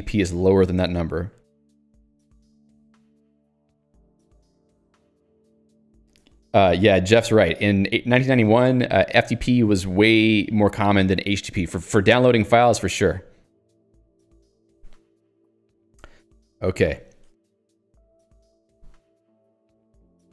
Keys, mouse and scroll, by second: 16.8 click, 16.9 Escape, 17.5 j.